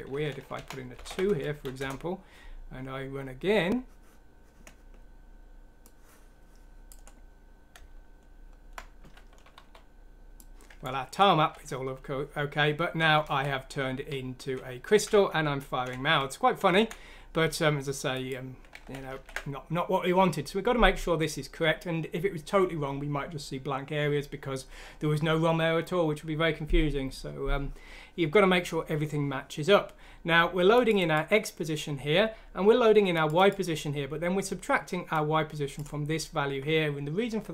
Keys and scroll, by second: 0.5 Right, 1.0 2, 1.6 F6, 1.8 Return, 7.7 End, 8.2 End, 8.3 End, 8.4-10.3 End, 9.5 typing, 11.3 z, 13.2 Right, 14.1 z, 15.0 Up, 15.1 z, 15.7 z, 15.8 Up, 15.8 z, 16.6 Down, 18.2 typing, 18.8 ctrl+z, 19.1 ctrl+z.